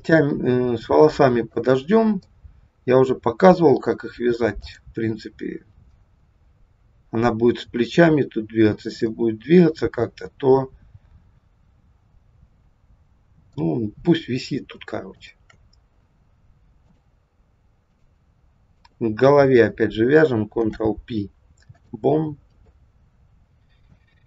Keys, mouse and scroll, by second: 0.1 middle click, 1.8-2.3 scroll up 2, 2.3 middle click, 4.6 click, 9.1 middle click, 15.2 shift+click, 16.9 click, 18.7 click, 20.4 ctrl+p, 22.7 middle click.